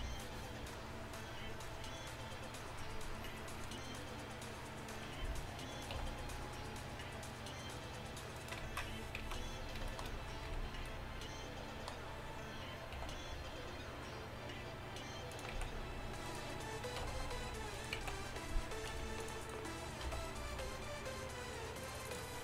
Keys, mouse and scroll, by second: 6.0 e, 8.7 ctrl+z, 9.3 z, 10.5 b, 13.0 e, 15.6 z, 17.0 g, 18.0 z, 19.0 c, 20.1 g.